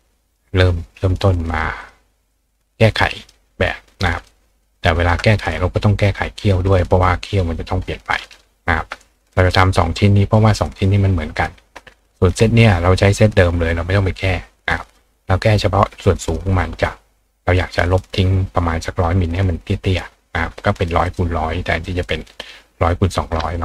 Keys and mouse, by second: 0.2 click, 1.5 click, 1.8 click, 2.3-3.3 drag, 4.2 click, 4.6 click, 5.8 click, 9.5 click, 10.3-11.4 drag, 11.8 ctrl+click, 14.9 click, 15.5 click, 19.2 click, 21.1 click, 21.8-23.1 drag.